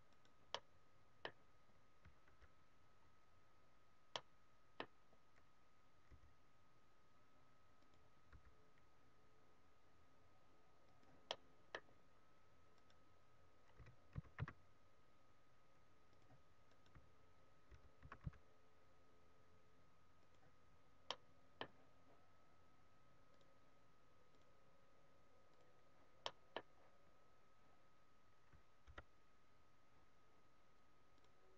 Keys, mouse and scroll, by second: 0.3 right click, 0.5 middle click, 2.2 KP_7, 3.5-4.2 scroll up 2, 4.2 middle click, 4.8-5.3 scroll down 2, 6.1 g, 7.9 click, 8.3 r, 11.1 click, 11.3 middle click, 13.0 right click, 13.7 g, 16.2 click, 17.0 right click, 17.7 g, 20.3 click, 20.8-21.1 scroll down 2, 21.1 middle click, 23.3 click, 26.3 middle click, 28.9 KP_7, 31.2 click.